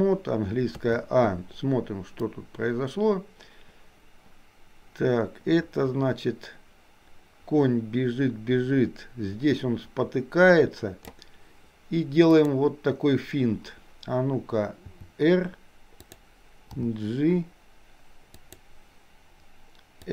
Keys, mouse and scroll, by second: 0.9 a, 2.4-11.3 drag, 12.3 click, 14.9 r, 16.8 g.